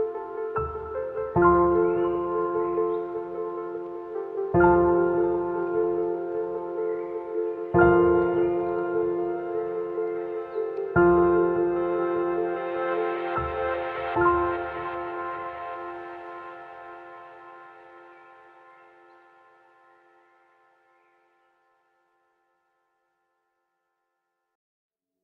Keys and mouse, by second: 0.8-1.6 drag, 1.8 shift+drag, 2.4 2, 3.2 shift+drag, 4.0 ctrl+b, 8.0 shift+drag, 9.5 ctrl+b, 14.7 shift+drag, 15.0 1, 16.6 click, 18.9-19.9 drag, 20.1 a, 20.5 2, 21.9 ctrl+b.